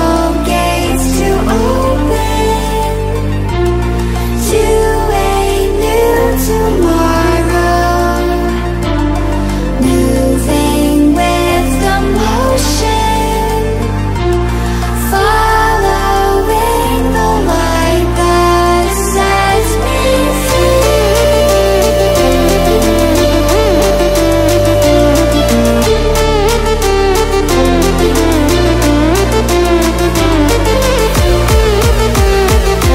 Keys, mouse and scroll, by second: 0.5 Right, 6.8 click, 9.9 Delete, 13.1-16.0 drag, 16.1-20.6 drag, 20.6-22.1 drag, 23.0 ctrl+alt+scroll up 1, 23.7-30.2 drag, 30.2 ctrl+alt+scroll up 1, 32.7-32.9 drag.